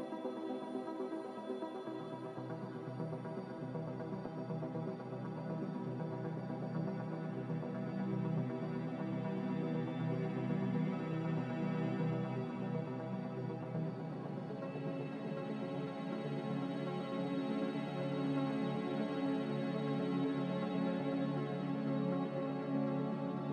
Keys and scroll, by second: 12.8 f, 19.3 n.